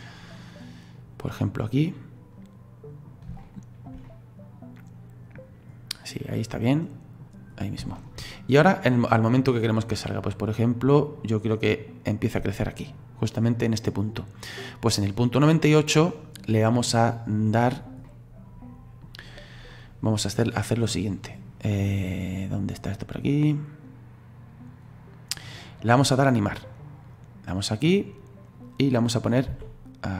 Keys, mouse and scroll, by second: 1.3-7.6 middle drag, 7.6-7.9 scroll up 1, 7.9 shift+middle click, 8.7-11.7 drag, 14.6 click, 17.5 right click, 18.1-22.7 middle drag, 27.1 click, 29.5 s.